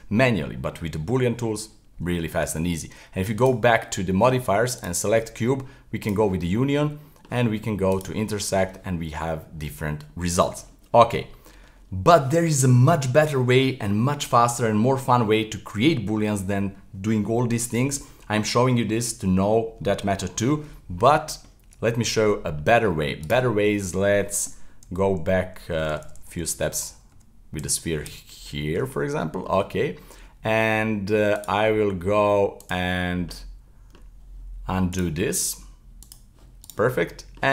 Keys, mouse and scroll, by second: 1.0-3.4 middle drag, 3.4 click, 4.8 right click, 6.0 click, 6.4-8.0 middle drag, 8.0 click, 8.3-13.2 middle drag, 20.7-23.2 middle drag, 23.2 right click, 25.8-26.8 z, 27.1 z, 27.6 z, 28.0 z, 28.9-29.5 middle drag, 29.5-31.4 scroll up 1, 31.4 click, 32.6 click, 33.2-34.9 scroll down 44, 34.9-36.6 drag, 36.6 right click, 37.0-37.5 middle drag.